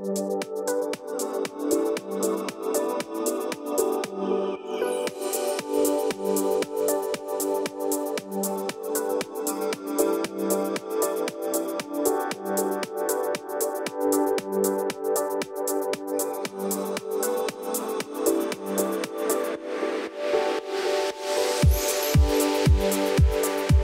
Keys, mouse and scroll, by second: 10.7 click, 11.7-12.2 alt+scroll up 2, 12.2 alt+scroll up 1, 12.5 alt+scroll down 2, 12.8-14.0 alt+scroll up 2, 15.2 click, 19.9 alt+scroll up 1, 21.0 click.